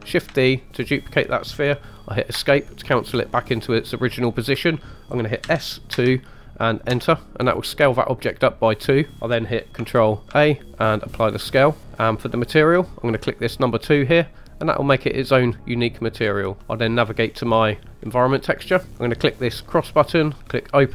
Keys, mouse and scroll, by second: 0.3 shift+d, 2.3 Escape, 5.4 s, 5.9 2, 6.9 Return, 7.4 scroll down 3, 8.2 scroll up 1, 8.7 middle click, 10.3 ctrl+a, 11.9 click, 14.6 click, 16.1 scroll up 1, 16.2 scroll down 2, 16.6 middle click, 16.6 scroll up 2, 17.2-18.0 scroll up 2, 18.0 scroll down 1, 18.4 middle click, 18.9 scroll up 1, 19.6 click, 20.6 click.